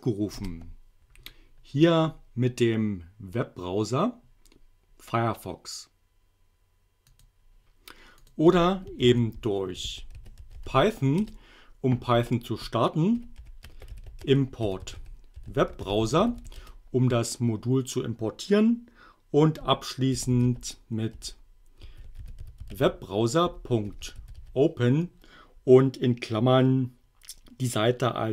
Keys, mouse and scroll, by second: 0.4 Return, 7.2 click, 8.2 click, 9.1 ctrl+c, 9.6-11.2 typing, 11.2 Return, 13.0-16.8 typing, 19.9-24.9 typing.